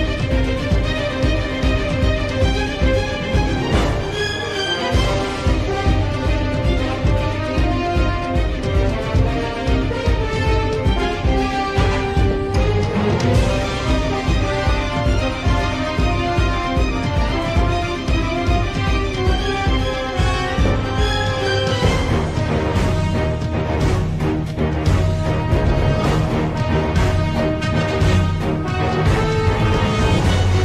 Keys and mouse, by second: 0.2 shift+middle click, 1.7 shift+middle click, 11.0 s, 15.2 t, 18.4-30.6 drag.